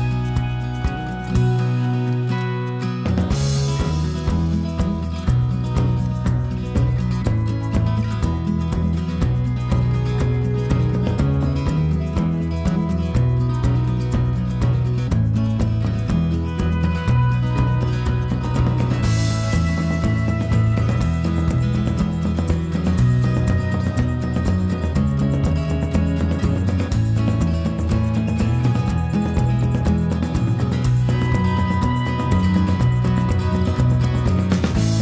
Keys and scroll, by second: 12.3 k, 13.5 k, 14.0 Escape, 16.4 p, 17.3 Escape, 20.6 f, 21.9 p, 22.5 Escape, 23.0 p, 25.2 l, 28.9 ctrl+z, 30.0 p, 32.2 e.